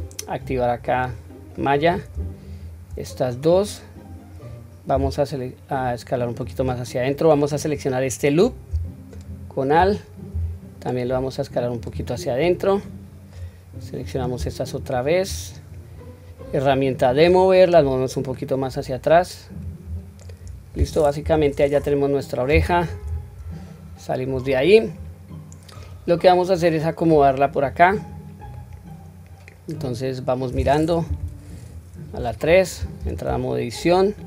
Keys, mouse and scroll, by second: 0.9 click, 1.5 middle click, 2.4 shift+click, 3.0 middle click, 3.9 scroll up 1, 4.5-4.9 scroll up 1, 4.9 s, 9.0 alt+click, 10.2 s, 12.1-13.3 middle drag, 13.9 click, 14.7 shift+click, 16.9 click, 18.2-19.5 drag, 19.8-20.3 scroll down 2, 20.2 middle click, 21.2 KP_1, 21.5-22.7 scroll up 1, 23.0 Tab, 23.3-23.8 scroll down 2, 24.2 scroll down 2, 26.5-27.6 drag, 28.0 scroll down 2, 28.5-30.7 middle drag, 31.0 KP_3, 31.6-33.0 scroll up 3, 33.0 Tab.